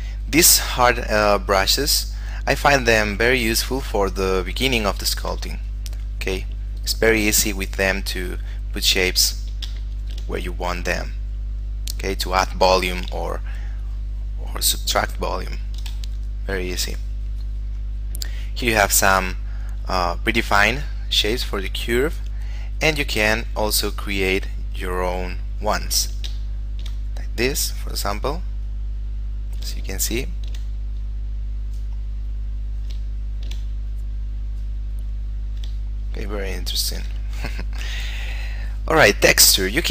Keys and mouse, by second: 5.1 shift+middle click, 5.9 click, 10.0 shift+middle click, 10.6 click, 13.5 ctrl+click, 15.3 ctrl+click, 15.8 ctrl+click, 16.3 shift+middle click, 18.1 click, 26.7 shift+middle click, 27.4 click, 30.1 shift+middle click, 31.2 click, 33.4 shift+middle click, 34.1 click, 36.1 shift+middle click, 38.7 click.